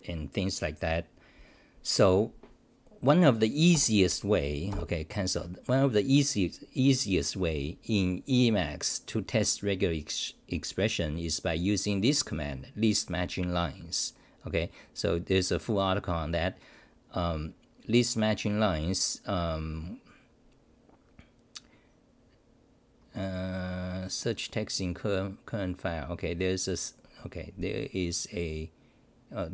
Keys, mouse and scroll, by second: 3.7 ctrl+g.